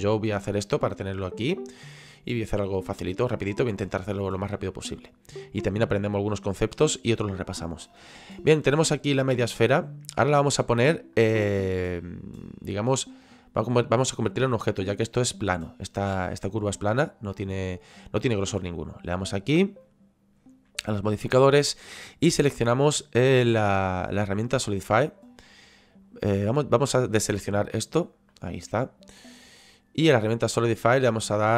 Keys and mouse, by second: 0.4 middle click, 5.5 middle click, 8.4 middle click, 16.0 middle click, 18.2 middle click, 19.4 click, 21.9 click, 24.7 click, 27.6 click.